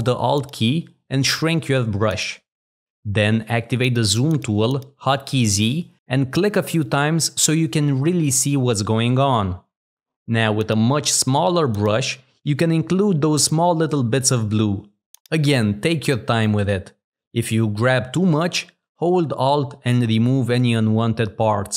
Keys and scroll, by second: 3.9 z, 7.4 w.